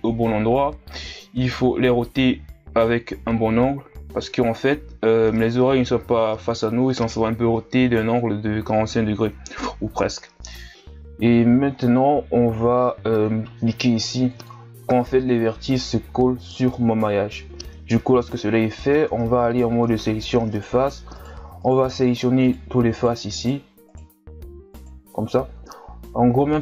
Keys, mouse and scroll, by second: 0.1 scroll up 2, 0.4-1.6 drag, 1.7 o, 2.1 r, 2.9 click, 3.7 KP_1, 4.0 Tab, 4.2 scroll down 2, 4.5-5.2 scroll up 3, 5.2 Tab, 5.5-6.8 drag, 6.8 Tab, 7.0-7.4 scroll down 1, 7.4-7.9 scroll up 2, 7.9 Tab, 8.1-8.5 ctrl+scroll up 2, 8.5 right click, 9.7 right click, 10.6 scroll down 2, 10.7 Tab, 11.7-12.1 scroll down 2, 12.1-14.3 scroll up 4, 14.3 click, 15.2 Tab, 18.9 ctrl+Tab, 20.5 right click, 21.1 shift+right click, 21.6 shift+right click, 22.1 shift+right click, 22.4 shift+right click, 22.9 shift+right click, 23.4 shift+right click, 23.8 shift+right click, 24.7 shift+right click.